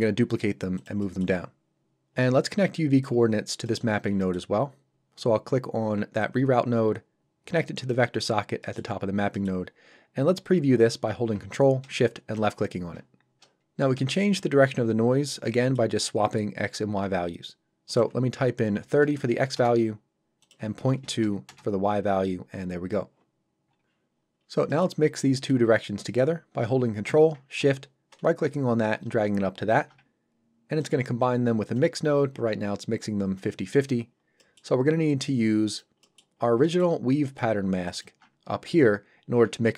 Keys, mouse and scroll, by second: 0.7 click, 1.0 middle click, 3.3 scroll down 1, 3.6 middle click, 3.9 scroll down 1, 4.2 middle click, 6.2 click, 8.2-8.6 scroll up 1, 8.6 middle click, 9.0-9.3 scroll up 1, 9.3 middle click, 12.3 ctrl+shift+click, 13.8 scroll up 1, 14.2 shift+middle click, 15.3 scroll up 1, 16.8 scroll up 1, 17.9 click, 18.8 KP_3, 19.6 Return, 20.4 click, 21.5 Return, 24.1 scroll down 1, 24.7 middle click, 25.0-25.3 scroll down 1, 25.4 middle click, 25.7-26.0 scroll up 1, 26.1 middle click, 28.1 ctrl+shift+right click, 30.8 shift+click, 34.4 middle click, 35.1 click, 36.0 middle click, 36.4 scroll down 1, 36.6 middle click, 37.9 ctrl+shift+Left, 37.9 ctrl+shift+click.